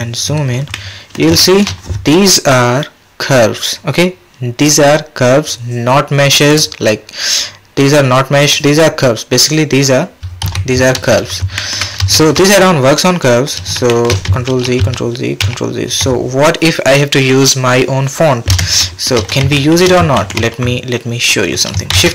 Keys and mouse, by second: 0.7 drag, 1.4 shift+drag, 6.7 click, 11.5 shift+drag, 12.1 shift+click, 13.9 shift+click, 14.5 ctrl+z, 14.8 ctrl+z, 15.4 ctrl+z, 18.8 shift+click, 19.6 shift+middle click, 21.9 shift+a.